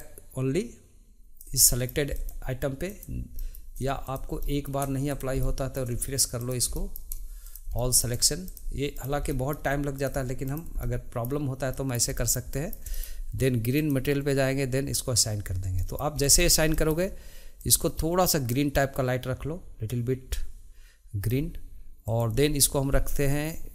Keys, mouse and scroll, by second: 0.0-1.6 drag, 1.6 middle click, 2.1 click, 2.8 click, 3.3 middle click, 4.0 shift+click, 4.4 middle click, 5.1 shift+click, 5.4 middle click, 6.3 shift+click, 6.7 middle click, 7.4 shift+click, 7.7 middle click, 8.4 shift+click, 8.9 shift+click, 9.3 middle click, 10.0 shift+click, 10.4 shift+click, 10.8-13.7 middle drag, 13.7 click, 14.9 click, 15.8 middle click, 16.2 scroll down 1, 16.3-17.6 shift+middle drag, 17.6-18.6 drag, 22.0-23.7 drag.